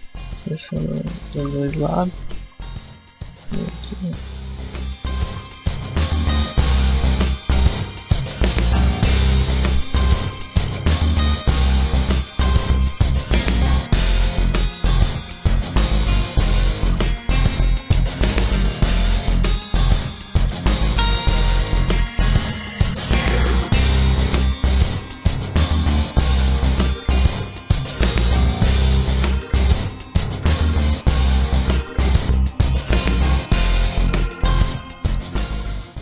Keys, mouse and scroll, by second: 0.3 alt+shift+right click, 0.8 middle click, 1.2 ctrl+z, 1.3 scroll up 1, 2.1 alt+shift+right click, 2.5 middle click, 2.9 w, 5.3 a, 5.3 middle click, 8.4 shift+middle click, 8.8 middle click, 10.0 middle click, 10.5 alt+right click, 10.8 alt+shift+right click, 11.3 w, 13.3 a, 13.6 scroll down 2, 13.8 middle click, 14.1 shift+middle click, 14.5 middle click, 15.3 alt+right click, 15.8 alt+shift+right click, 16.7 ctrl+z, 17.4 alt+shift+right click, 18.2 w, 19.4 shift+middle click, 20.3 alt+right click, 20.8 alt+shift+right click, 21.5 ctrl+z, 22.2 alt+shift+right click, 22.7 w, 24.2 a, 24.6 shift+middle click, 25.0 middle click, 25.4 shift+middle click, 25.7 middle click, 26.0 scroll up 1, 26.6 alt+right click, 27.0 alt+shift+right click, 27.5 w, 28.8 a, 29.1 scroll down 2, 29.3 middle click, 30.4 shift+middle click, 30.7 scroll up 1, 30.8 middle click, 32.5 scroll up 1, 32.8 middle click, 35.4 middle click.